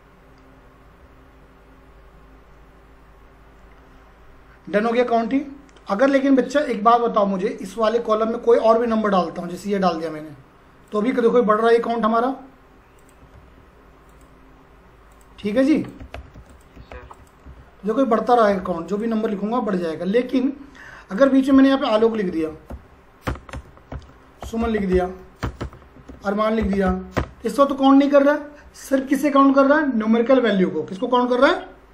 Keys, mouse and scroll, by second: 8.6 click, 9.5 typing, 10.8 click, 12.9-13.8 typing, 14.1 click, 14.5-15.1 scroll down 1, 15.1 click, 15.2-19.1 typing, 15.8 click, 16.5 click, 17.1 click, 17.6-18.3 scroll up 1, 18.3 click, 18.8 click, 19.5 scroll up 1, 21.2 click, 21.7-27.3 typing, 23.3 Return, 25.5 Return.